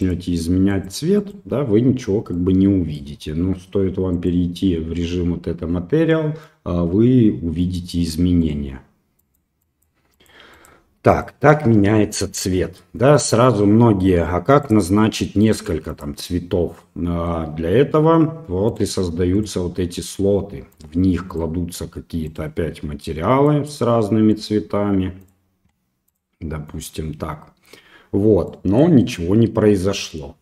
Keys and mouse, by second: 2.3-3.0 middle drag, 4.1 click, 6.5-7.6 middle drag, 8.4 click, 12.6 middle click, 16.8-17.3 middle drag, 18.7 click, 19.3 click, 20.7 click, 21.3 click, 22.3 click, 24.3 click, 25.2 click, 26.1 drag, 28.5 middle drag.